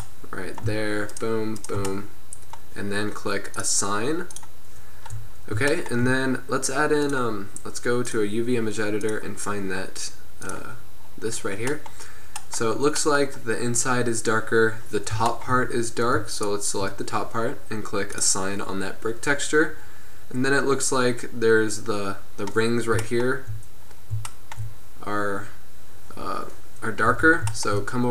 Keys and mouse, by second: 3.7-6.2 drag, 6.2-7.2 middle drag, 7.2-15.0 drag, 15.0-16.5 middle drag, 18.3-19.9 drag, 19.9-23.9 middle drag, 27.3 Tab.